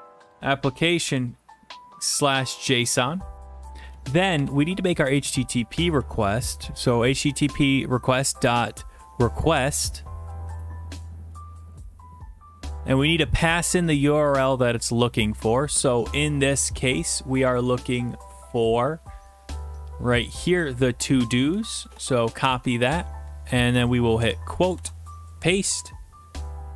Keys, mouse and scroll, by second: 0.0 typing, 2.1-2.8 typing, 3.8 Return, 4.4-6.5 typing, 5.7 Tab, 9.0-9.8 typing, 10.5 Return, 14.8-16.0 scroll, 16.9 click, 17.9-19.2 scroll, 21.2 click, 21.7 ctrl+c, 22.5 alt+Tab, 24.2 typing, 24.7 ctrl+v, 25.7 Right.